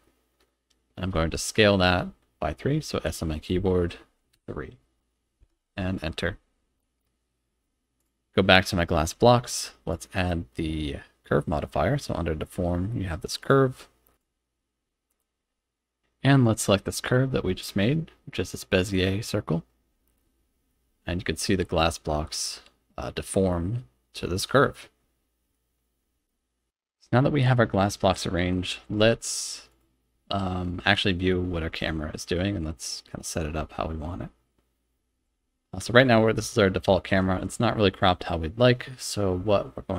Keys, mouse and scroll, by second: 0.0 middle click, 3.1 s, 4.3 3, 5.4 KP_Enter, 7.0-7.6 middle drag, 8.0 click, 9.9-13.5 drag, 14.1 click, 17.3-19.5 drag, 20.7-25.5 middle drag, 26.3-26.6 shift+middle drag, 35.3 KP_0.